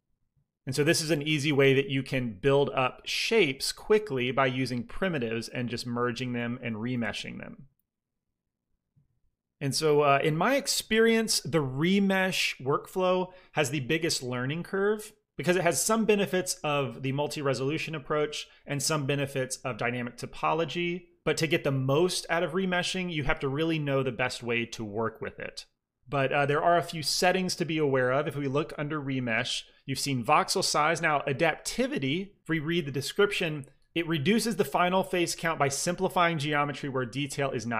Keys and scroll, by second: 3.4-4.3 typing, 6.6 typing.